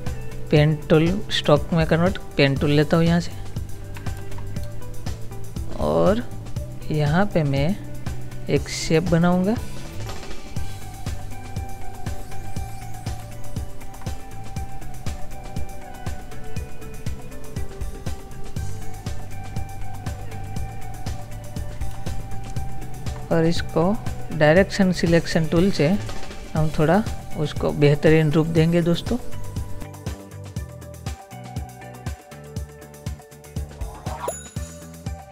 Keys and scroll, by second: 4.2 ctrl++, 4.7 space, 30.1 ctrl+z, 31.3 Right, 33.5 Right, 33.9 Up, 34.2 Up, 34.5 Left.